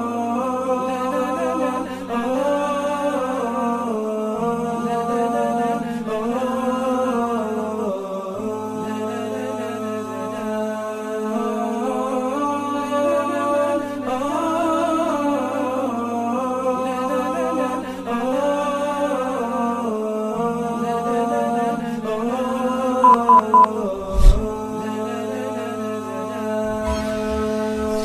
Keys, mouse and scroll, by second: 0.1 space, 0.2 alt+scroll up 3, 8.6-8.9 alt+scroll down 1, 9.4 space, 10.7 i, 16.1 ctrl+0.